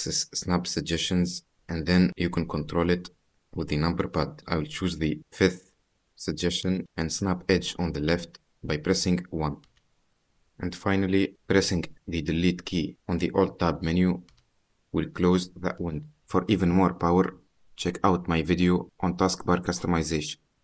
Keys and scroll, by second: 10.9 alt+Tab, 13.7 alt+Delete.